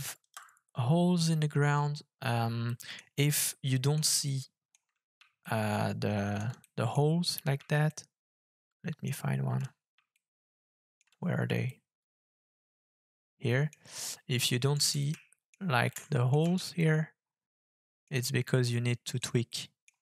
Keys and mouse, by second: 0.1 KP_0, 2.7 middle click, 3.7 middle drag, 4.2-4.7 shift+drag, 5.4-6.4 shift+drag, 6.6 click, 6.7 middle click, 7.9-9.1 shift+middle drag, 10.1 shift+middle click, 11.6-13.7 shift+middle drag, 14.1 shift+middle click, 15.0 ctrl+click, 15.2 ctrl+middle click, 15.9 ctrl+middle click, 16.6-18.1 shift+drag, 18.8 click, 19.5 click, 19.7 middle click.